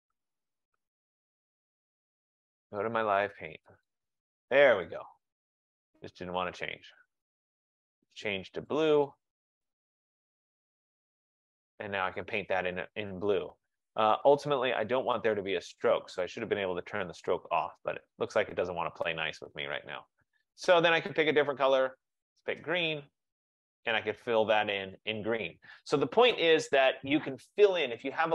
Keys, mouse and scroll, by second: 2.9 click, 4.0 click, 6.0 click, 6.9 click, 7.1 click, 8.7 click, 9.7 click, 11.4 click, 14.3 click, 14.9 click, 16.4 click, 17.3 click, 17.8 click, 18.4 click, 19.3 click, 20.4 click, 20.5 click, 22.3 click, 23.0 click, 24.0 click, 24.7 click.